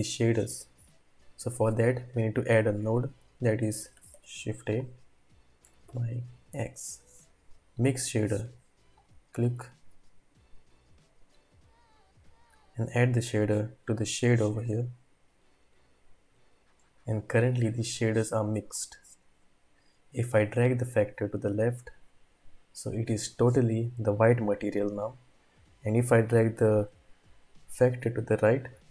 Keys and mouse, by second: 4.1 shift+a, 11.2-15.0 drag, 16.3-16.8 middle drag, 16.8 click, 17.0 typing, 18.7-22.2 drag, 26.2-28.9 drag.